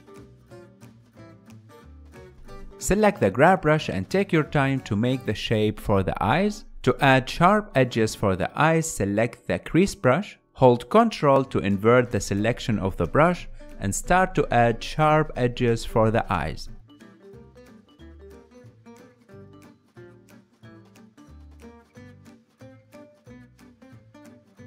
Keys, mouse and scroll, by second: 1.4 click, 2.3-3.6 middle drag, 3.6-6.5 drag, 6.5 ctrl+z, 7.9 click, 8.4 f, 9.5-17.2 ctrl+drag, 17.2-18.4 ctrl+middle drag, 18.4-24.2 ctrl+drag, 24.2 middle click.